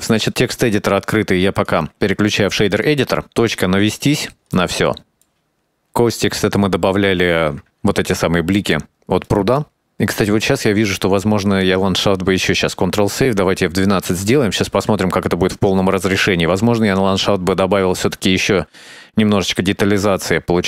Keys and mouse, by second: 0.6 click, 1.9-2.4 drag, 3.3 KP_Decimal, 4.2 middle click, 4.9 click, 5.3 middle click, 7.2 shift+middle drag, 8.7 shift+middle click, 11.4-11.7 right drag, 13.1 ctrl+s.